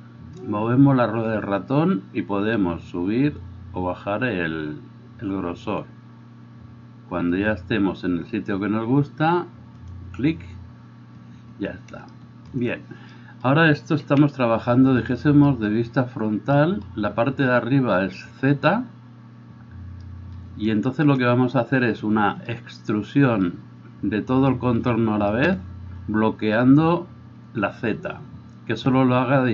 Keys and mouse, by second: 14.1 KP_1.